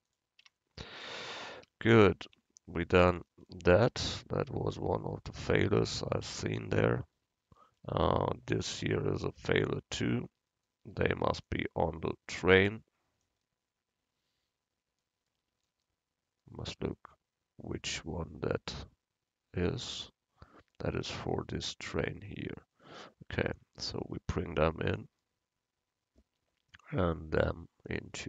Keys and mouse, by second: 0.5 Tab, 1.6 a, 2.3 Tab, 5.8-7.9 drag, 8.7-13.3 right drag, 11.5-13.3 drag, 22.9-25.3 drag, 23.6-25.1 right drag, 27.0-28.2 right drag, 28.0-28.2 drag.